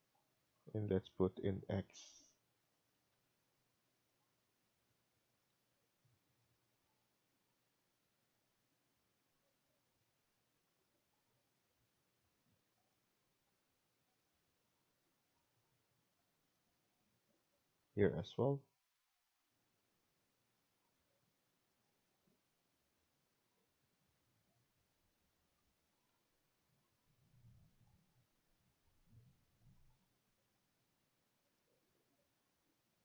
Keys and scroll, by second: 2.8 Escape, 5.4 Escape, 8.6 Escape, 10.8 Escape, 14.3 Escape, 16.6 Escape, 20.7 Escape, 26.0 Escape, 30.0 Escape.